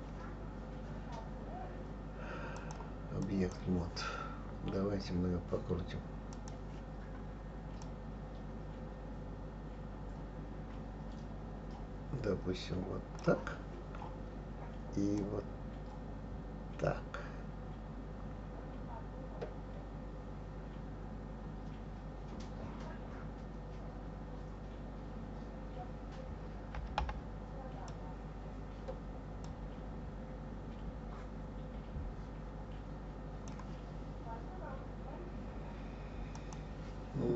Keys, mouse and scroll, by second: 2.6-5.6 drag, 6.3 click, 7.9-10.8 drag, 15.2-18.2 drag, 29.4-32.5 drag, 36.3 click.